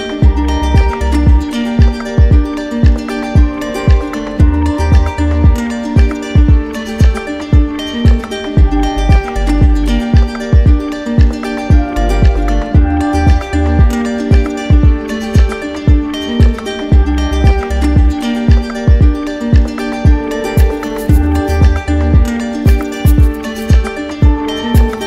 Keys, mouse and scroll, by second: 0.0 right click, 0.2 alt+right click, 0.2 alt+right click, 0.7 alt+right click, 2.4 z, 3.8 right click, 4.7 click, 6.3 click, 8.5 click, 11.2-12.3 drag, 12.6-13.7 drag, 14.1-15.2 drag, 16.0 click, 17.8 click, 20.5 click, 22.3 click, 23.3 click, 24.1 click.